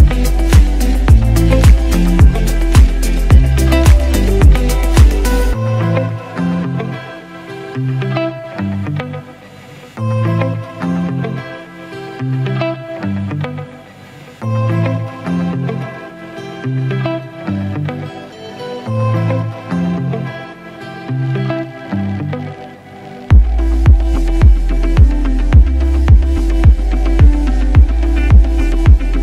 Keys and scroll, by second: 0.9 ctrl+alt+g, 1.1 ctrl+t, 8.0 ctrl+shift+Tab, 9.1 ctrl+a, 11.4 ctrl+Tab, 12.1 ctrl+a, 12.3 ctrl+c, 13.7 ctrl+v, 14.4 ctrl+alt+g, 14.5 ctrl+t, 19.9 ctrl+shift+Tab, 20.6 ctrl+a, 21.0 ctrl+c, 21.4 ctrl+w, 22.5 ctrl+v, 23.1 ctrl+alt+g, 23.2 ctrl+t.